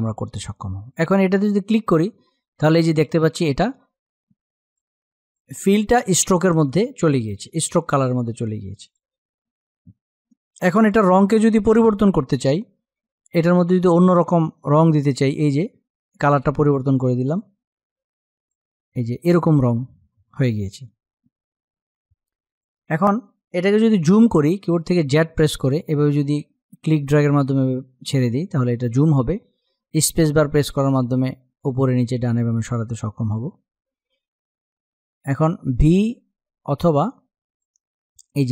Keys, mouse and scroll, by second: 0.9 click, 14.3-18.0 drag, 22.2 click, 24.4 z, 25.4-29.2 drag, 29.2 space, 29.6 click, 29.8 space, 30.0 space, 37.1 click.